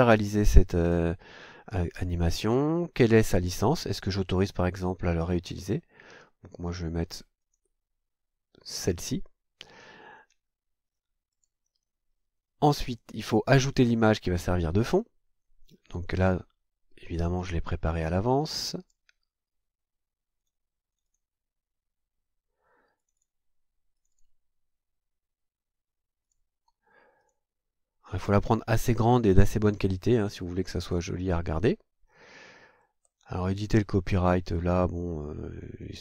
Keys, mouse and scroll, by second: 2.9 click, 7.4 click, 11.3 click, 16.0 click, 18.8 click, 20.4 click, 20.9 click, 23.0 click, 23.9 click, 26.2 click, 27.2 click, 32.8 scroll down 2, 34.6 click.